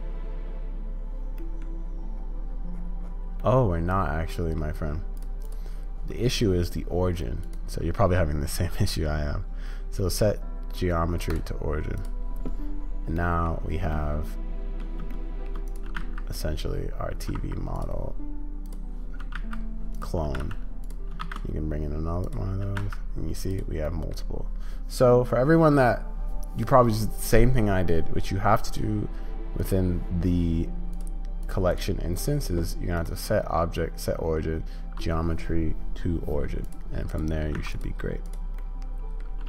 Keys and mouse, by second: 1.4 middle drag, 3.4-4.6 middle drag, 7.4-11.4 drag, 13.2 middle click, 13.9 middle click, 14.0-14.8 shift+drag, 14.8 middle drag, 15.1-15.5 shift+drag, 15.5 middle click, 15.7-21.1 drag, 22.6 g, 23.8 drag, 29.6-39.2 drag.